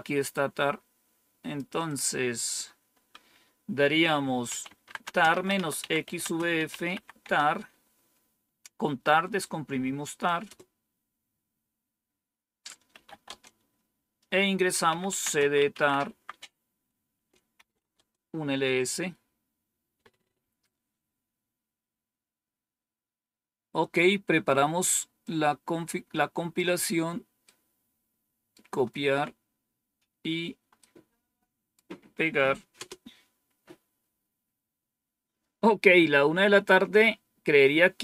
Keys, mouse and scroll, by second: 0.2-1.5 drag, 1.8 click, 4.2-7.3 typing, 10.4 Return, 12.6-13.5 typing, 14.6-16.2 typing, 17.1 Return, 17.5-18.2 typing, 21.4-22.1 scroll down 1, 25.1-26.5 drag, 27.4-28.5 right drag, 30.7-31.7 right drag, 32.7 Return.